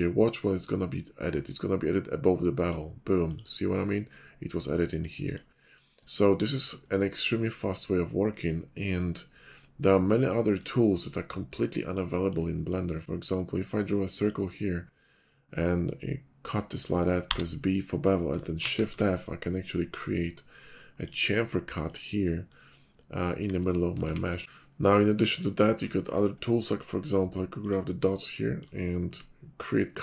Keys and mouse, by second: 5.0 click, 5.3 click, 6.0-6.4 middle drag, 7.0 middle drag, 7.2-7.8 drag, 10.5-12.0 shift+middle drag, 12.0 click, 12.0 shift+right click, 13.0-18.3 drag, 13.0-18.3 right drag, 18.3 shift+middle click, 18.9-21.0 drag, 18.9-21.0 right drag, 24.0 ctrl+z, 24.6 click, 27.6 middle click.